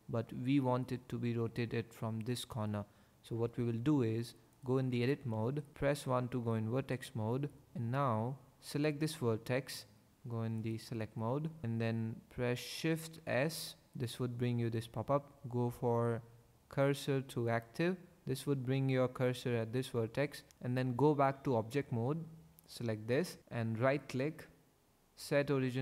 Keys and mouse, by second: 4.9 Tab, 5.7 1, 10.6 click, 12.9 shift+s, 21.8 Tab, 23.9-25.8 drag.